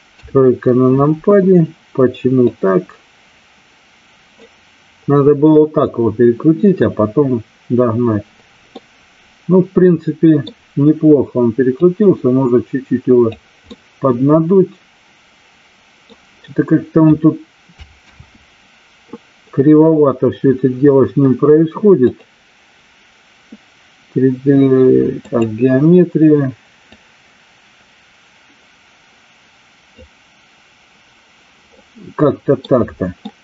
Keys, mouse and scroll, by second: 0.0 KP_3, 2.6-4.3 drag, 8.7-10.6 middle drag, 11.8-13.3 drag, 13.6-16.0 middle drag, 17.9 ctrl+z, 22.2-25.4 drag, 26.9-29.8 drag, 31.7-32.7 middle drag, 33.2-33.4 middle drag.